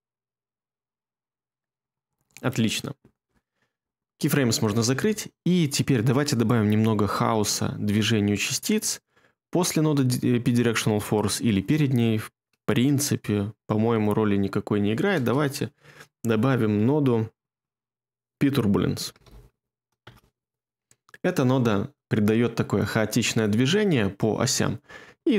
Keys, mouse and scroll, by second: 2.0 space, 15.1 space, 18.4-19.7 typing, 20.0 Return.